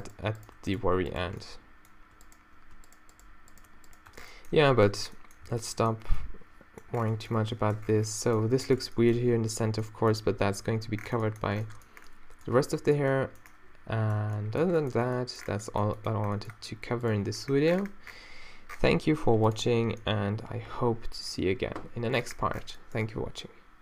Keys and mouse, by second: 4.1 shift+Tab, 5.0 shift+a, 5.5 shift+a, 17.1-19.3 middle drag, 19.9 a.